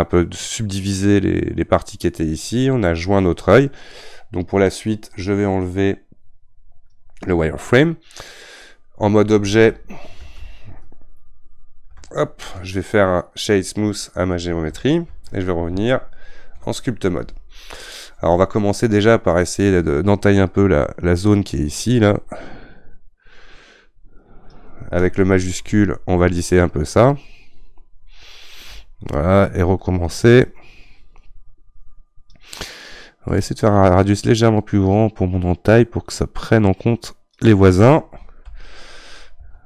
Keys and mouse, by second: 6.9-12.0 drag, 12.0 ctrl+Tab, 13.5-16.6 right drag, 16.6 ctrl+Tab, 19.3-33.5 drag, 33.5-34.7 right drag, 34.7-39.6 drag.